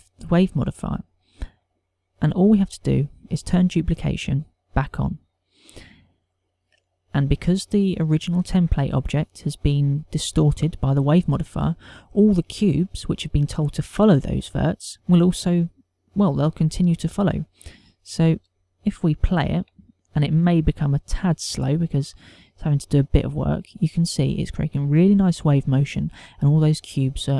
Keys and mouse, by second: 2.9 click, 5.6 click, 18.8 click, 20.5 alt+a.